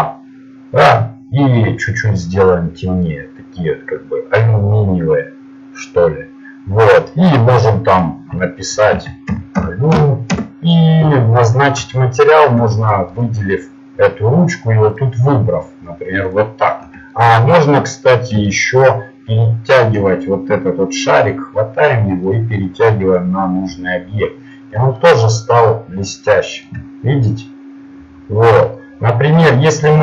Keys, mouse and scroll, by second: 2.1-3.8 drag, 4.3-5.8 drag, 7.9-10.3 drag, 11.9 middle click, 13.3-16.3 right drag, 16.3 click, 17.3-18.9 middle drag, 21.3-23.2 drag, 25.5 middle click.